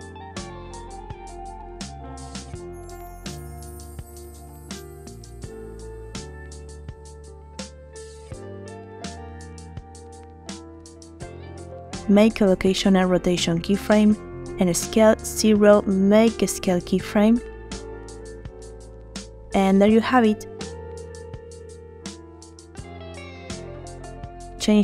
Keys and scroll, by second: 12.9 i, 15.1 s, 16.2 0, 17.9 i, 19.4 space.